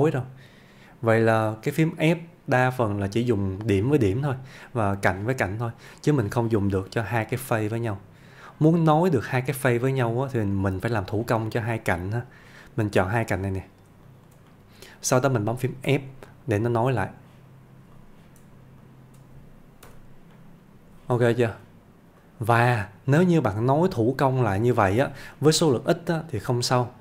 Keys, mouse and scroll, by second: 2.8-3.4 middle click, 7.4-8.0 middle click, 11.0 click, 14.1 shift+click, 14.5-15.2 middle click, 15.9 f, 16.3-17.3 middle click, 18.0 click, 18.8 shift+click, 19.9 f, 20.4-21.0 middle click, 21.3 shift+middle click, 22.3 click, 23.3 shift+click, 24.0 f, 24.5-25.1 middle click, 25.2 scroll down 1, 25.5 shift+middle click.